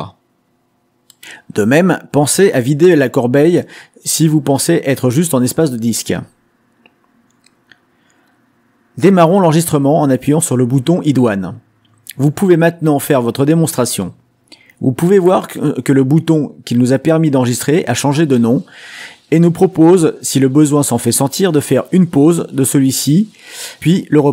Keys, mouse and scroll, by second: 5.9-7.2 drag, 8.0-9.4 drag, 11.2 click, 24.1-24.3 drag.